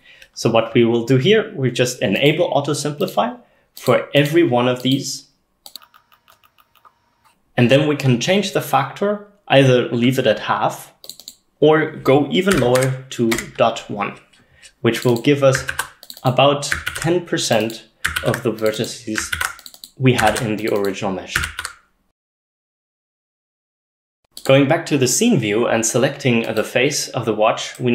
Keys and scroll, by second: 12.6-13.3 typing, 13.4 Return, 15.7 ctrl+c, 16.9 ctrl+v, 18.2 ctrl+v, 19.4 ctrl+v.